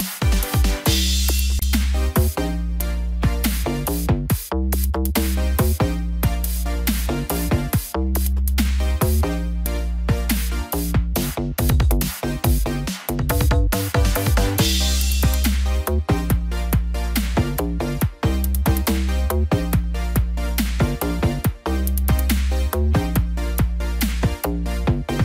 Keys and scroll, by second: 2.5 ctrl+j, 2.8 ctrl+t, 9.0 ctrl+-, 9.6 ctrl+0.